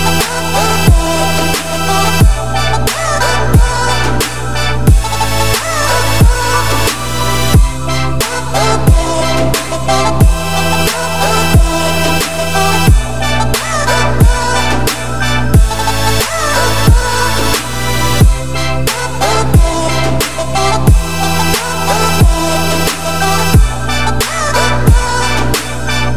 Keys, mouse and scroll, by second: 1.8 click, 8.4 click, 8.6 scroll up 3, 8.8 z, 10.0 z, 10.3-10.9 scroll down 11, 10.9 shift+middle click, 11.3 z, 12.0 shift+middle click, 12.3-12.7 scroll up 2, 12.8-14.4 shift+middle drag, 14.4 click, 14.8 `, 15.5-16.4 middle drag, 16.4 scroll down 5, 16.9 middle drag, 17.2-17.7 scroll up 1, 17.8-19.0 middle drag, 19.0 click, 19.7 click, 21.0-22.3 drag, 23.2-24.6 drag, 24.6-25.2 scroll down 10, 25.2 shift+middle click, 25.5 scroll up 5, 26.1 click.